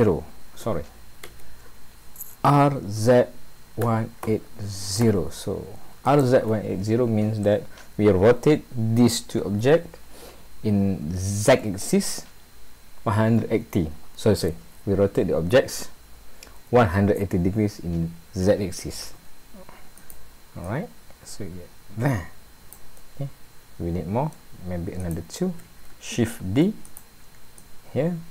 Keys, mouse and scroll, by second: 2.4 r, 20.0 click, 20.7 click, 23.0 middle click, 25.0 click, 26.4 shift+d, 27.6 click.